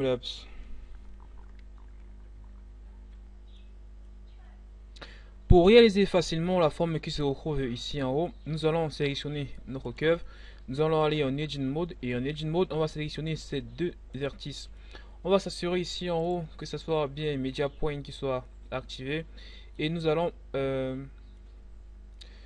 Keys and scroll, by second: 10.8 Tab.